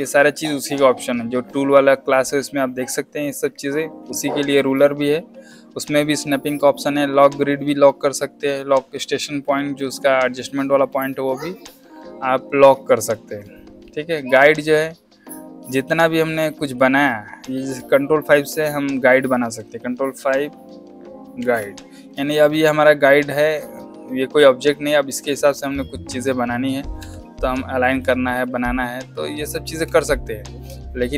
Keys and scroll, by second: 21.3 ctrl+5, 22.0 space, 22.6 z, 23.5 space, 26.9 Escape.